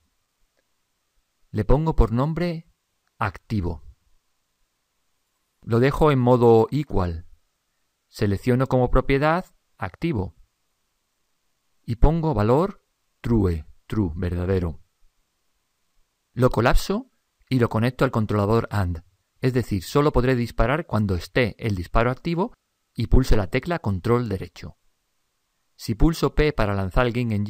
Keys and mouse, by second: 1.6 click, 7.0-8.9 middle drag, 8.3 click, 17.5-20.2 drag, 21.8-25.0 drag, 27.0 p.